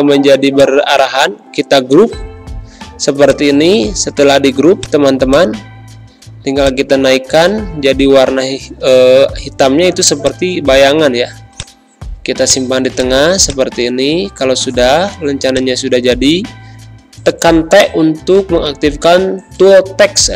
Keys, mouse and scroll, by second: 1.4 ctrl+g, 3.2 click, 3.5 space, 4.1-10.2 drag, 13.1 space, 13.4 click, 13.6 space, 14.4 t, 15.4 click, 16.8 b, 18.1 t, 19.1 Return, 19.4 a.